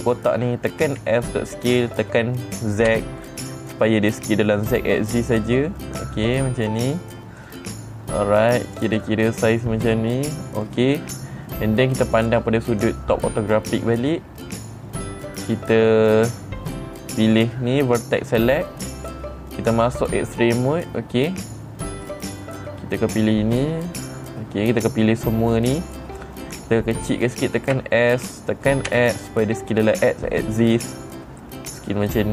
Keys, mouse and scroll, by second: 1.4 s, 9.1 click, 9.5-11.1 middle drag, 12.6 click, 17.8 click, 20.4 click, 22.5-24.1 drag.